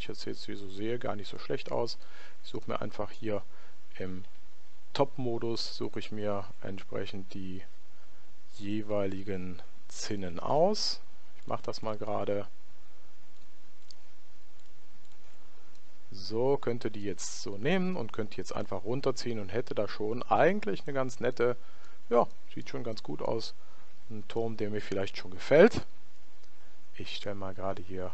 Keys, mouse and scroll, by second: 0.0-1.8 middle drag, 1.3 right click, 2.7-4.4 middle drag, 4.4 KP_7, 8.7-16.0 right drag, 15.8-17.5 middle drag, 16.8 right click, 18.6 click, 21.4-26.9 middle drag, 24.0 Tab.